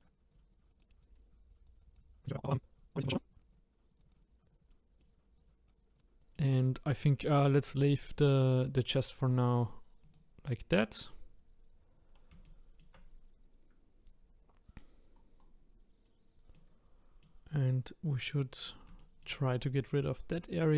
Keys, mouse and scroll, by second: 0.5 click, 0.8 middle click, 1.0 click, 1.2 scroll up 2, 1.5 click, 2.0 click, 3.3 click, 4.2 click, 4.6 click, 4.7 middle click, 5.0 click, 5.4 click, 6.0-10.0 middle drag, 10.0 click, 12.4-15.1 shift+middle drag, 15.1-16.0 scroll down 2, 16.0 scroll up 1, 16.5 middle click, 18.2 click, 19.2-20.7 shift+middle drag.